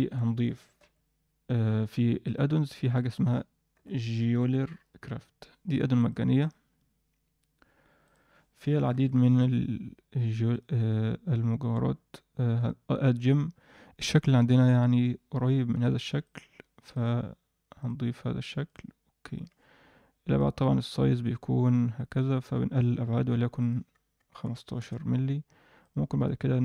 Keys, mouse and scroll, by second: 0.7 ctrl+alt+u, 10.5 click, 12.5-18.8 drag, 20.3-22.8 drag, 23.5-24.8 drag, 25.8 click.